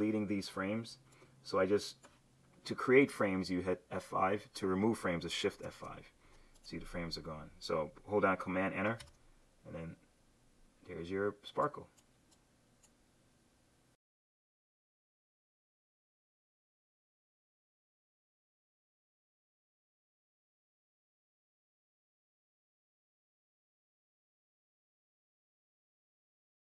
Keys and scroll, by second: 5.7 shift+F5, 9.0 super+Return.